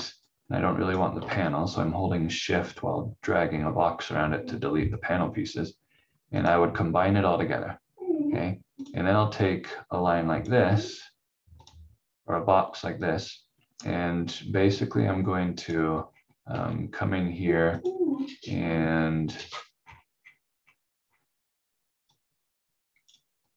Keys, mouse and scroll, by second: 0.2 shift+click, 6.4 click, 16.0-16.5 scroll up 1, 17.8 click, 18.1 scroll down 1, 19.8 scroll up 1, 22.1 click.